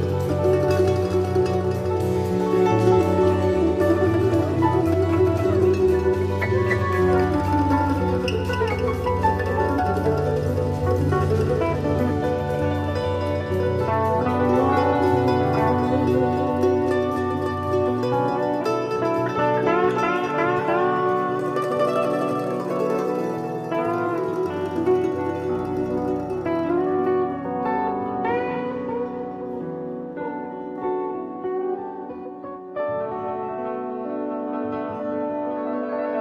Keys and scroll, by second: 1.7 super+c, 1.9 super+f, 2.4 shift+Down, 4.4 super+c, 4.6 super+f, 5.0 shift+Down.